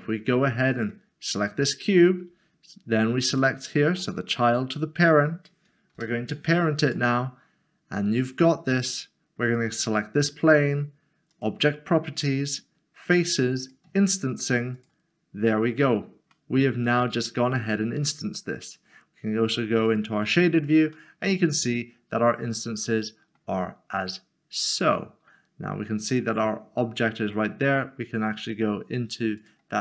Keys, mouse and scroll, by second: 0.7 click, 2.3 click, 3.3 shift+click, 5.9 ctrl+p, 6.8 click, 13.6 click, 15.6-16.3 scroll down 1, 16.3 middle click, 19.8 click, 20.9 middle click, 24.5 scroll up 1, 25.1 middle click, 26.1 click, 26.4 s, 29.3-29.8 shift+scroll.